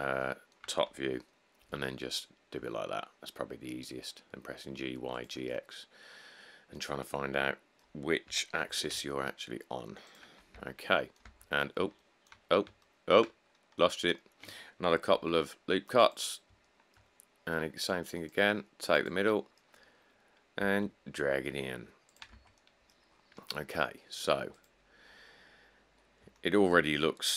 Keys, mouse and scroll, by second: 1.9 g, 8.5 g, 8.9 z, 10.7 Tab, 11.5 Tab, 11.8 scroll up 2, 11.9 middle click, 11.9 middle click, 12.7 middle click, 12.8 middle click, 15.3 ctrl+r, 20.2 middle click, 20.3 middle click, 20.3 middle click, 20.9 e, 22.5 Tab, 23.3-23.7 middle click, 25.8 middle click, 26.0 middle click, 27.1 middle click, 27.1 middle click.